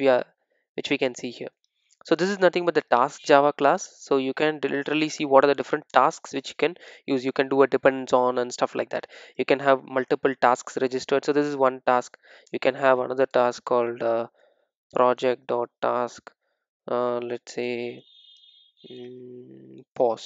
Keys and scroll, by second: 2.5 ctrl+shift+super+F12, 5.0 super+e, 14.3 Return.